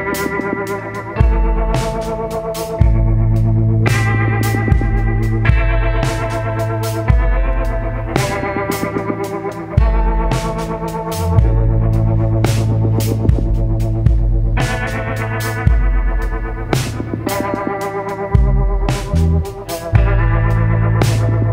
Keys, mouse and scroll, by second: 1.5-3.3 drag, 4.2 ctrl+z, 7.2 click, 9.1 click, 10.0 click, 11.2 click, 12.9 click, 14.3 click, 15.0 click, 16.5 Delete, 17.6 click, 18.2 Delete.